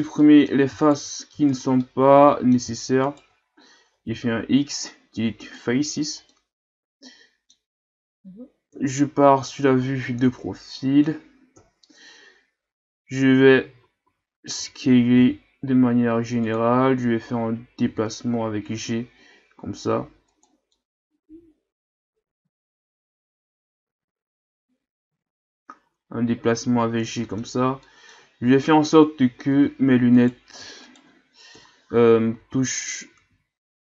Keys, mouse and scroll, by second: 0.2 middle click, 0.8 shift+right click, 1.5 shift+right click, 1.8-3.1 middle drag, 3.1 shift+right click, 4.0 x, 6.3-8.7 middle drag, 8.7 KP_3, 10.1-11.6 middle drag, 11.6 KP_3, 13.8 a, 14.1 a, 14.5 a, 15.2 s, 17.8 g, 20.7-23.8 middle drag, 27.8-29.5 middle drag, 29.5 Tab, 30.2 right click, 30.8 shift+right click, 31.5 KP_3, 32.4 Tab, 32.5-33.1 scroll up 1, 33.1 a, 33.3 a.